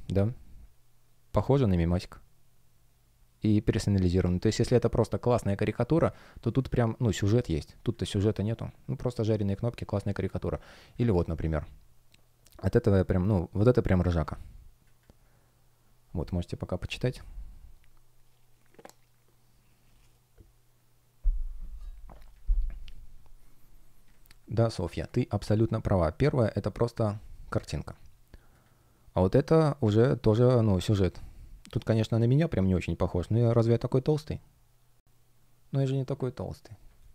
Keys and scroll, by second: 0.1 space, 6.2 space, 36.9 space.